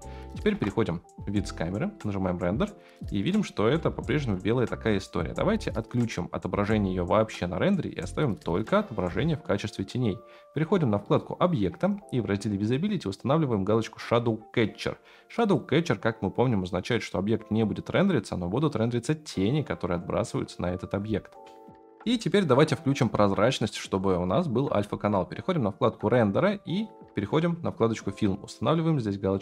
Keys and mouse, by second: 0.5 KP_0, 3.8 shift+middle click, 15.4 click, 21.7 F9, 26.0 click, 29.3-29.4 drag.